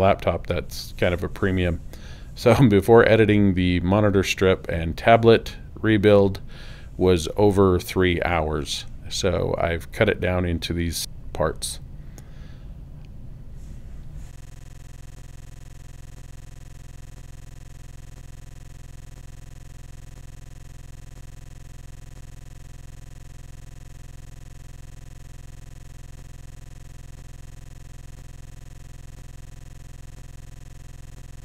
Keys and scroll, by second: 0.1 Tab, 0.8 f, 18.7 ], 25.9 [, 27.3 ].